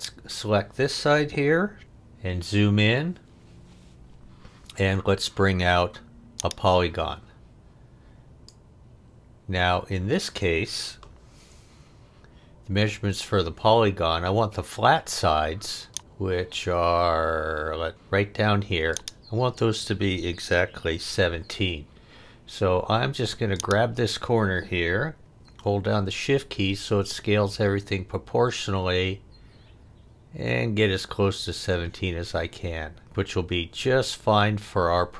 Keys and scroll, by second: 1.8 f.